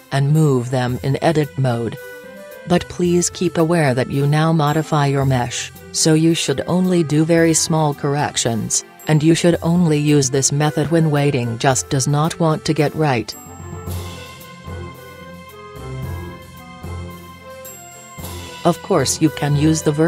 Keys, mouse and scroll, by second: 1.3 click, 2.4 g, 3.1 right click, 4.2 g, 6.0 g, 6.9 right click, 7.5 click, 9.0-9.8 right drag, 10.1-11.9 drag, 12.4-14.1 drag, 15.1-17.3 right drag, 16.6-19.3 drag, 19.4-20.0 right drag.